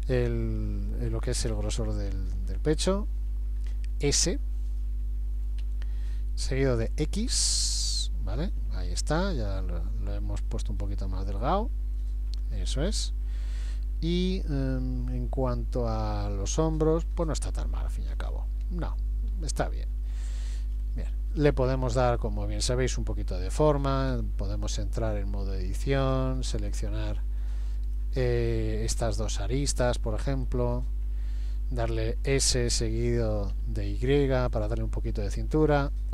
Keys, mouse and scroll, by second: 5.6 s, 13.6 middle click, 18.1 KP_1, 18.6 KP_3, 20.1 shift+middle click, 20.8-21.3 scroll up 3, 21.3 middle click, 22.3-22.8 scroll down 1, 23.1-23.8 scroll down 1, 24.1 Tab, 26.7 click, 27.9 click, 28.5 middle click, 29.8 shift+click, 30.2 shift+click, 30.5 middle click, 32.3 s.